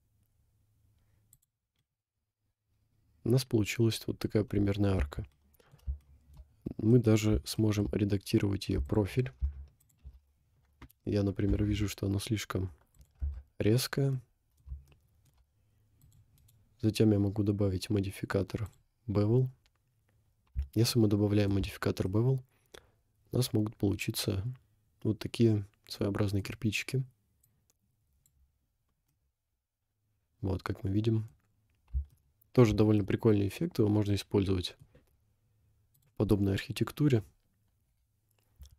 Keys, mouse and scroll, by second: 2.0-4.3 middle drag, 5.0 Tab, 5.5 middle click, 6.0 shift+middle click, 6.5 scroll up 3, 6.9 middle click, 7.6 shift+middle click, 7.8 shift+middle click, 7.9 scroll up 2, 8.9 alt+click, 9.8 alt+shift+click, 11.5 g, 13.2 Tab, 13.9 scroll down 1, 14.3 middle click, 14.9 shift+middle drag, 16.0-18.8 drag, 20.2 scroll down 2, 21.1 shift+middle click, 21.2 shift+middle click, 21.3 shift+middle click, 22.4-24.5 middle drag, 24.6-26.0 middle drag, 26.1-26.5 middle drag, 27.4-28.2 drag, 29.3-31.1 middle drag, 31.1 middle click, 31.7 scroll down 2, 32.1-32.7 shift+middle drag, 33.0 middle click, 33.5 middle click, 36.0 click, 37.9 Delete.